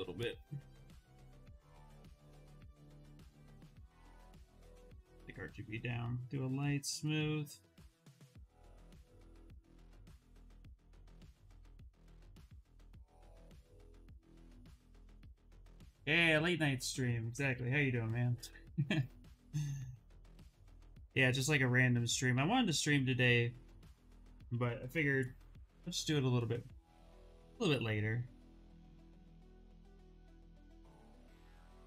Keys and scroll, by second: 1.6 shift+space, 2.8 space, 7.0 space, 14.2 b, 17.0 b, 17.3 v, 17.8 s, 23.6-25.9 typing.